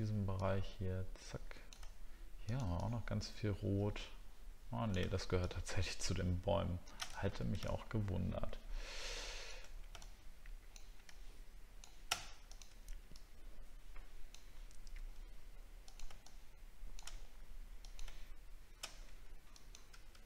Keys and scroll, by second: 7.2 alt+scroll down 11.